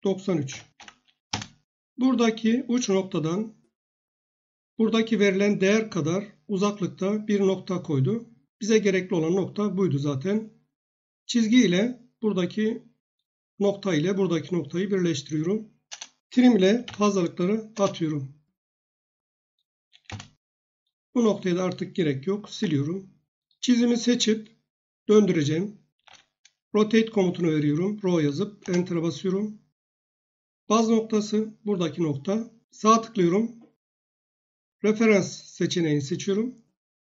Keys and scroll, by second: 0.0-1.2 typing, 1.3 Return, 15.9 Return, 16.5-17.3 typing, 17.7 Return, 20.1 Return, 22.5 Delete, 25.7-26.6 typing, 28.6 Return.